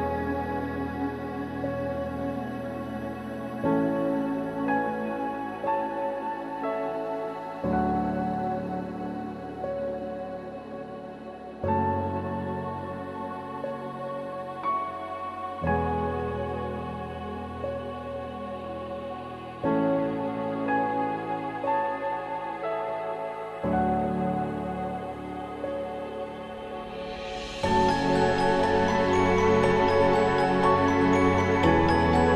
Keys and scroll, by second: 5.8 ctrl+=, 29.8 ctrl+-.